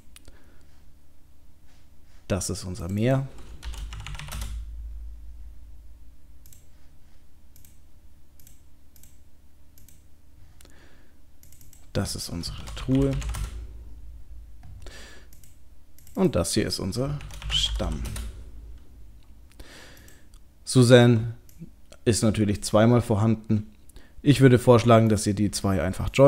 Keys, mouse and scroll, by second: 4.1 e, 6.5-9.0 click, 12.5 click, 15.4 click, 16.0 click, 17.0 click, 17.9 m, 20.0 click, 25.2 click.